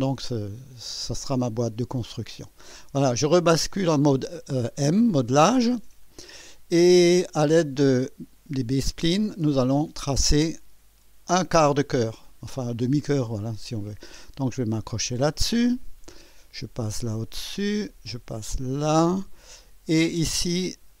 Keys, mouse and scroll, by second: 5.7 click, 9.5 click, 15.8 click, 17.5 click, 19.0 click.